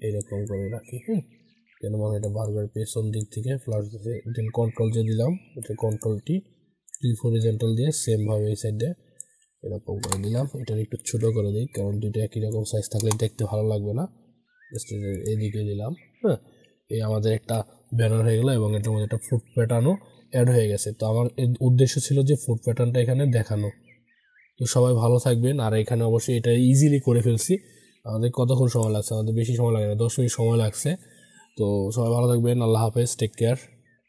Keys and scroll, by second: 4.5 ctrl+j, 5.4 ctrl+t, 10.8 ctrl+t.